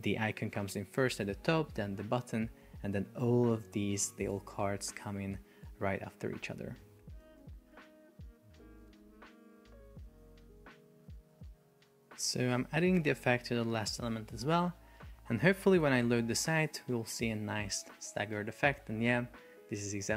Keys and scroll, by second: 0.5 super+r, 1.9 super+r, 5.1 super+r, 7.0 Escape, 7.2-8.8 typing, 7.4 Return, 7.7 super+k, 8.0 Return, 8.4 Return, 8.7 super+k, 9.0 Return, 9.5 Return, 10.0 super+k, 10.2 Return, 10.8 Return, 11.3 super+k, 11.5 Return, 13.0 Return, 15.9 super+p.